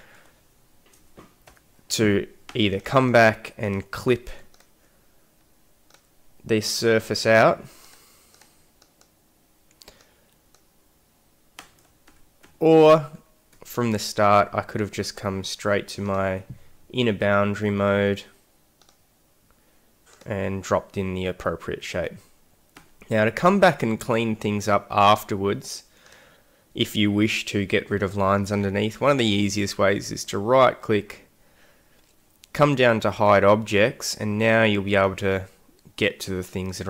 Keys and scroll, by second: 1.5 ctrl+y, 12.1 ctrl+z, 22.8 x.